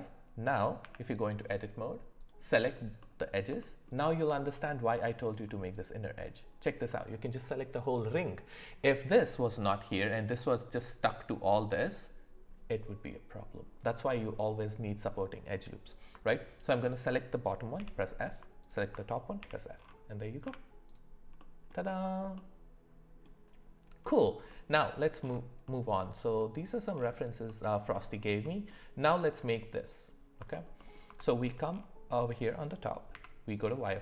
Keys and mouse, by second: 0.8 Tab, 2.2 click, 3.0 middle click, 3.6 middle click, 17.8 f, 18.6 click, 19.4 f, 20.4 Tab, 21.4-21.7 middle drag, 21.9 click, 22.3 middle click, 31.2 shift+middle click, 32.4 click, 33.1 z.